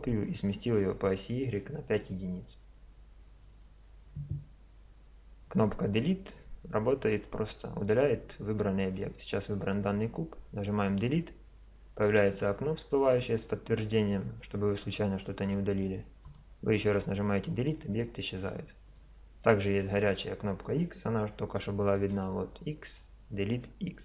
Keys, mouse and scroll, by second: 10.9-12.7 drag, 18.9 right click, 22.1 x.